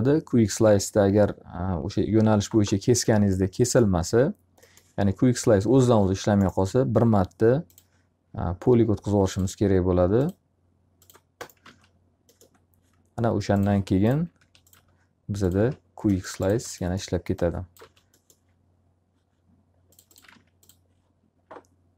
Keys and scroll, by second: 11.2 alt+a, 14.3 alt+r, 20.2 alt+a.